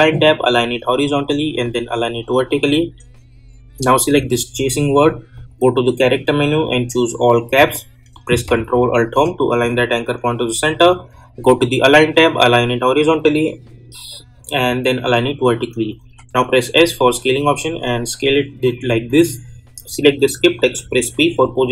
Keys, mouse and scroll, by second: 4.0 click, 9.0 ctrl+alt+Home, 11.5 click, 15.0 click, 16.0-19.7 drag, 20.8 p, 21.6-21.7 drag.